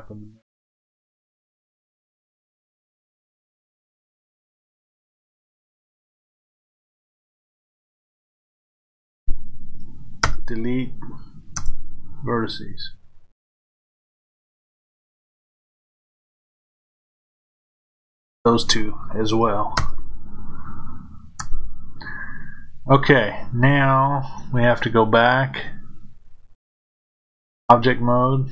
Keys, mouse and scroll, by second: 3.3 click, 6.2-28.5 drag, 10.2 Delete, 11.6 KP_Enter, 19.7 Delete, 21.4 KP_Enter.